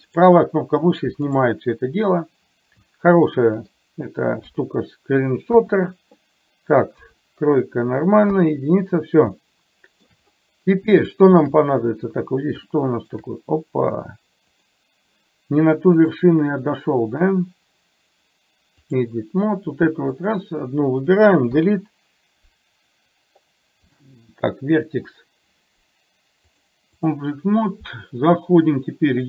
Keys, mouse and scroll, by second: 2.9 middle click, 3.8-4.5 scroll down 1, 4.5 scroll down 1, 4.6 KP_3, 9.4-9.9 shift+scroll up 1, 9.9 shift+middle click, 11.1 shift+middle click, 12.8 shift+middle click, 14.5 click, 16.1-19.1 drag, 20.1 click, 21.5 Delete, 26.6 click.